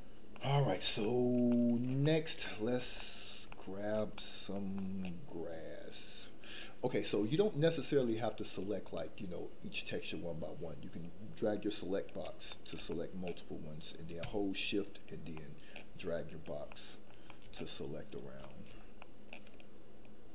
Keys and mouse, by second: 0.3 middle click, 1.0 shift+middle click, 1.5 middle click, 2.0 shift+middle click, 2.4 middle click, 3.0 shift+middle click, 3.5 middle click, 4.1 shift+middle click, 4.7 middle click, 6.0 click, 8.0 click, 8.4 click, 8.8 click, 9.7 click, 11.1 click, 12.4 middle click, 12.9 shift+middle click, 14.6 shift+click, 15.3 shift+middle click, 16.1 shift+click, 16.7 shift+middle click, 17.2 middle click, 18.4 shift+middle click, 19.0 shift+middle click, 20.0 shift+click.